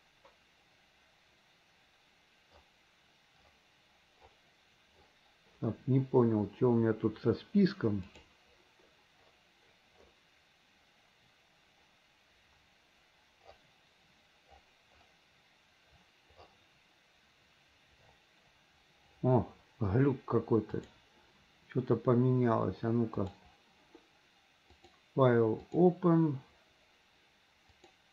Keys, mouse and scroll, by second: 24.7-26.0 drag.